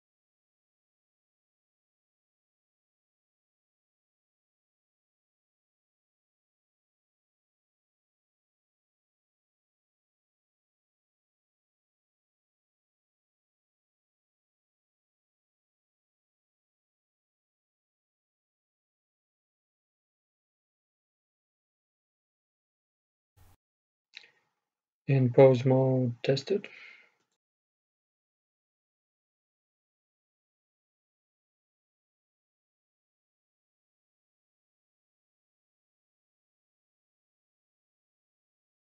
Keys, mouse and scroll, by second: 1.8 w, 7.1-9.6 middle drag, 9.6-11.1 scroll down 1, 11.1-11.7 scroll down 1, 11.8-15.0 middle drag, 15.0-15.3 scroll up 1, 15.3 middle click, 15.9-16.9 scroll down 2, 16.0 middle click, 16.9-17.8 scroll down 1, 17.8-18.9 scroll down 1, 18.9-19.5 scroll down 1, 19.5-21.4 drag, 22.5-24.2 right drag, 24.2-27.9 drag, 31.9-33.8 right drag, 33.8-35.7 drag, 36.9-38.9 right drag.